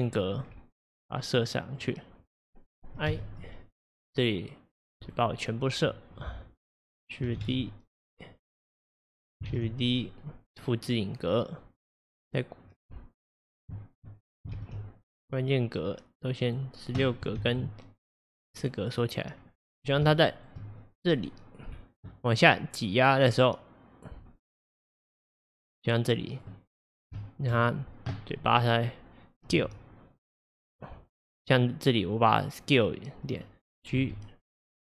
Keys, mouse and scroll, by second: 0.5 scroll, 3.1 l, 5.2 l, 6.2-8.6 drag, 7.4 ctrl+d, 9.1 click, 9.6 shift+d, 11.7-14.6 drag, 12.7-13.0 scroll, 14.6 shift+d, 17.5 shift+d, 19.4 scroll, 20.2-21.2 shift+middle drag, 21.2 scroll, 23.0-26.0 drag, 26.9-27.3 scroll, 27.3 shift+middle click, 27.5-28.7 scroll, 29.6 s, 34.0 g.